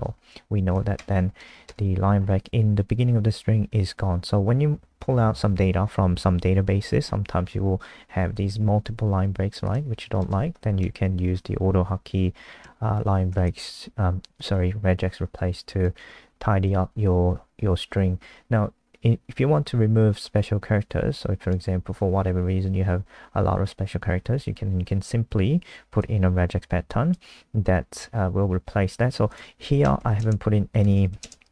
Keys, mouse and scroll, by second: 0.9 ctrl+shift+End, 1.4 BackSpace, 1.7 BackSpace, 2.2 scroll up 2, 8.3 click, 10.7 Home, 11.3-12.9 scroll down 3, 12.9 shift+click, 13.4 ctrl+c, 13.6 click, 14.4 click, 16.0-16.6 scroll up 3, 16.6 ctrl+v, 17.9 Up, 20.4 click, 29.7 Left, 30.0-31.5 typing.